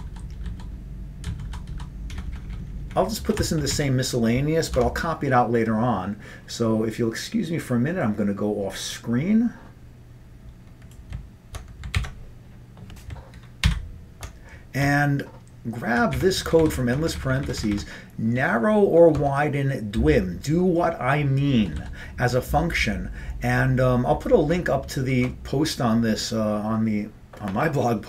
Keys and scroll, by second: 0.1 Down, 0.5 Down, 1.3 Down, 1.6 Down, 1.8 Down, 2.2 Up, 2.3 Up, 2.5 Up, 2.6 Up, 2.9 Up, 3.4 Return, 3.5 Return, 3.8 Up, 4.8 Tab, 12.0 alt+w, 13.7 ctrl+y, 14.9 Up, 15.4 Up, 15.5-16.2 Up, 16.4 Up, 16.5 Up, 16.7-17.3 Up, 17.5 Up, 17.6 Up, 17.7 Up, 19.2 Tab, 21.7 Down, 21.8 Down.